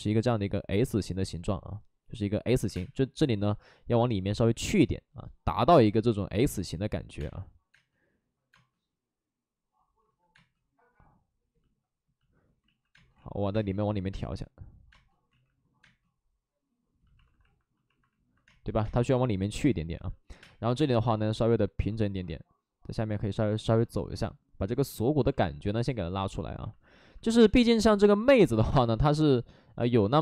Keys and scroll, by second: 2.6 3, 7.1 3, 7.7 space, 8.5 space, 10.0 ctrl+z, 10.3 space, 12.6 ctrl+z, 12.9 space, 13.1 ctrl+z, 13.5 space, 15.3 ctrl+z, 15.8 space, 17.2 alt+s, 18.4 space, 20.3 5, 27.3 space, 28.3 space, 28.6 space, 28.6 3, 29.8 space.